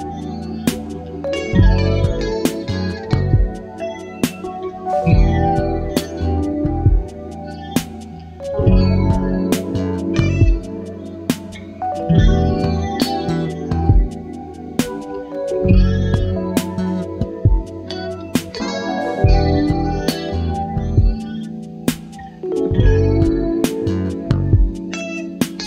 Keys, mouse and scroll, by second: 1.0 shift+click, 1.4 shift+click, 2.1 shift+click, 2.8 shift+click, 4.2 ctrl+shift+KP_Add, 7.8 click, 9.3 ctrl+d, 10.9 shift+click, 11.4 shift+right click, 12.7 click, 15.3 click, 16.4-18.4 drag, 19.5 click, 21.0 click, 21.4 click, 24.2 click, 25.5 click.